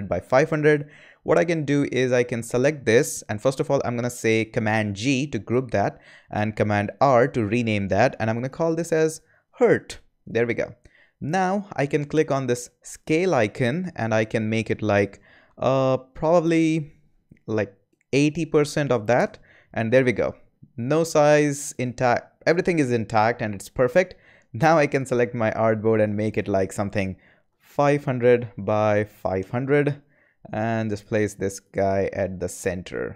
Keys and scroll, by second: 4.9 super+g, 6.9 super+r, 8.2-10.0 typing, 10.2 Return, 17.9-18.8 typing, 19.1 Return, 27.2-28.9 typing, 29.3 Return.